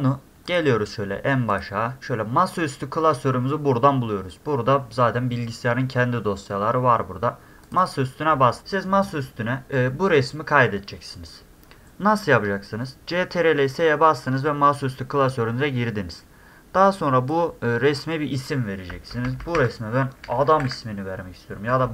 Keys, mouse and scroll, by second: 0.4 click, 1.5 click, 7.6 click, 7.8 click, 9.0 click, 17.3-17.9 drag, 20.0-21.0 typing.